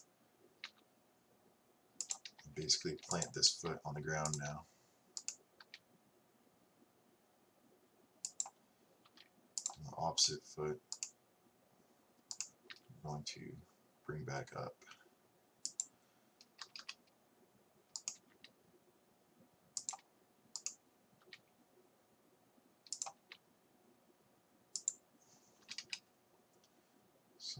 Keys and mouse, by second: 3.6 g, 5.4-7.3 right drag, 9.1 r, 10.3 right click, 11.0-14.5 right drag, 12.9 g, 16.7 a, 16.8 a, 18.0 right click, 18.2 g, 20.6-22.8 right drag, 23.3 g, 25.7 a, 25.9 a.